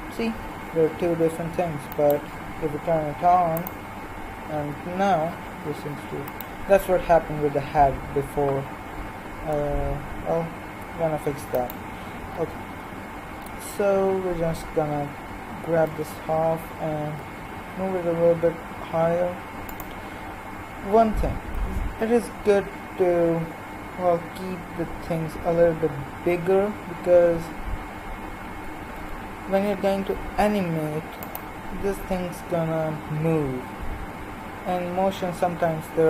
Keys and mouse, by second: 4.6-7.6 drag, 4.6 g, 9.8 middle click, 12.3-15.7 right drag, 12.3 z, 15.9 l, 17.0 g, 28.6 s, 31.8 g.